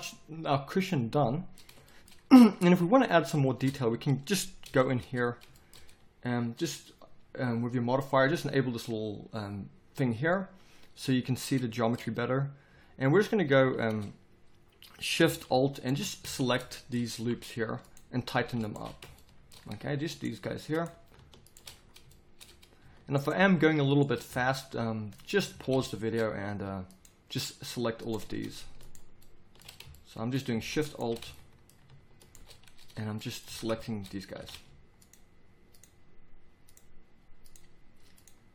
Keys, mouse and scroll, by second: 4.7 Tab, 11.1 middle click, 12.7 a, 13.1 a, 13.5 a, 16.2 z, 17.2 z, 24.3 z, 25.5 z, 26.1 middle click, 29.9 middle click, 30.3-31.4 middle drag, 33.4 z, 34.4 z.